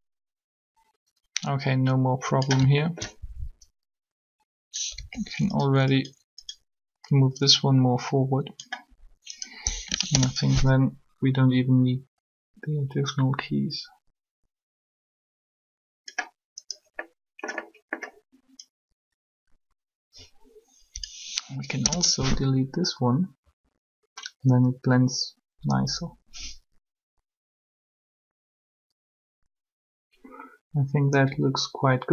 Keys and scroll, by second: 4.9 r, 9.7 Delete, 9.9 Return, 21.3 Delete, 21.8 Return.